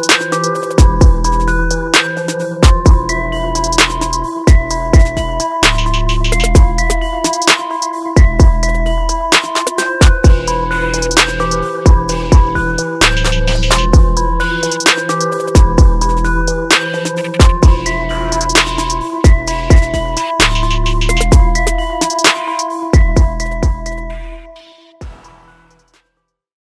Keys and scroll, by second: 2.0 ctrl+-, 10.9 ctrl+-, 11.1 ctrl+0.